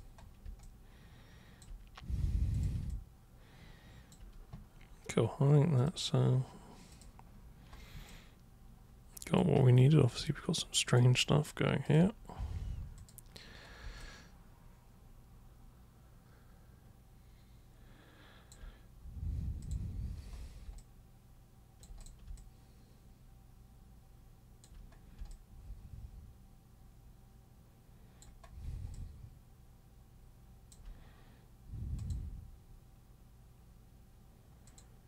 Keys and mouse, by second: 0.6-1.6 alt+super+drag, 2.5 super+click, 2.9-4.1 alt+super+drag, 5.8 super+click, 6.9 super+click, 8.0-9.4 alt+super+drag, 10.2 alt+super+click, 11.8 super+click, 13.0 super+click, 14.0-18.5 alt+super+drag, 19.6 super+click, 20.8-21.8 alt+super+drag, 22.0 super+click, 22.4-24.6 alt+super+drag, 25.3-28.2 alt+super+drag, 28.9-30.7 alt+super+drag, 31.9 super+click, 34.7 super+click.